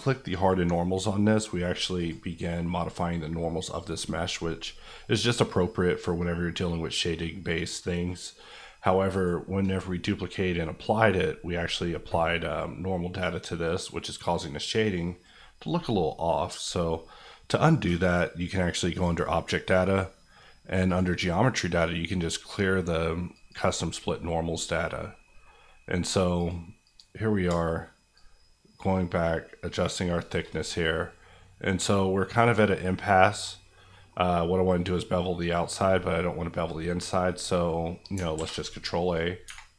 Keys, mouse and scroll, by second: 24.0 middle click, 26.3-30.0 drag, 30.0-33.5 shift+middle drag, 33.5 scroll up 1, 33.9 middle click, 38.4 ctrl+a, 39.0 click, 39.4 Tab.